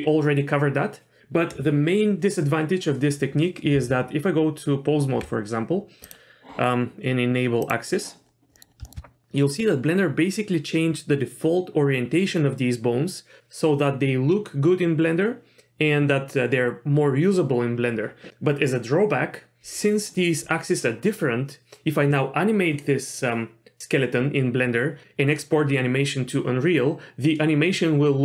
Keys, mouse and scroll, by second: 3.7 Tab, 5.7-6.0 scroll up 1, 6.0 click, 7.6 click, 8.3-8.8 scroll up 3, 8.5 middle click, 8.8 shift+middle click.